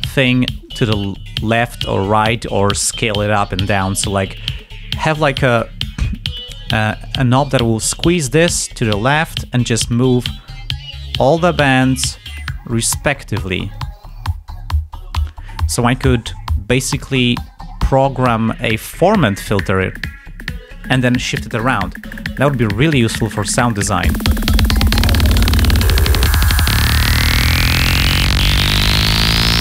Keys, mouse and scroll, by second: 10.3 click, 11.2 click, 12.2 click, 13.3 click, 14.0-17.2 drag, 18.1 click, 19.7 click, 20.6 click, 24.0 click, 26.5 click, 26.9 ctrl+scroll down 2, 28.5 ctrl+scroll up 2.